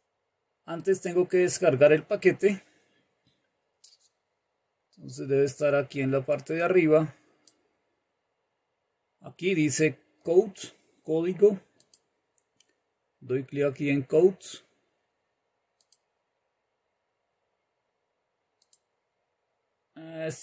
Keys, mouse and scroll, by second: 1.5-7.9 drag, 12.0 click, 15.9 click, 18.9 click.